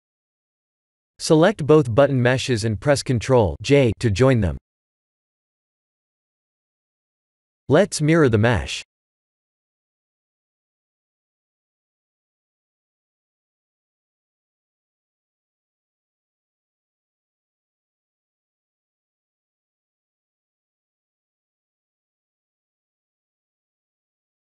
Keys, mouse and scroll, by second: 1.0 middle click, 1.8 ctrl+j, 3.5 middle click, 4.3 scroll up 2, 5.4 KP_1, 5.8 KP_7, 7.9 click, 10.6 click, 11.8 click, 12.1 middle click, 12.8-13.4 scroll down 7, 13.4 click, 13.7 middle click, 18.2 click, 19.0-20.3 scroll up 7, 20.7 shift+click, 21.6 click, 23.9-24.5 scroll down 6.